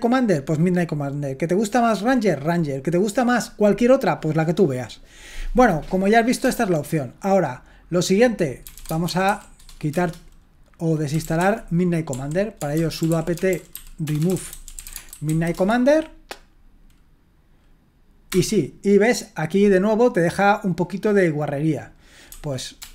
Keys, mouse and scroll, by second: 6.4 q, 8.5-9.7 typing, 9.9 Return, 10.9-15.7 typing, 18.3 Return, 22.3-22.9 typing.